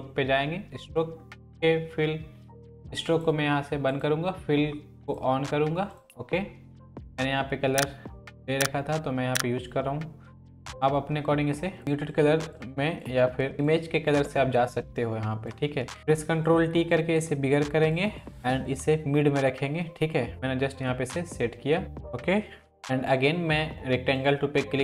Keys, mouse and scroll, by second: 3.1-7.5 drag, 16.0 ctrl+t, 16.4-17.4 shift+drag.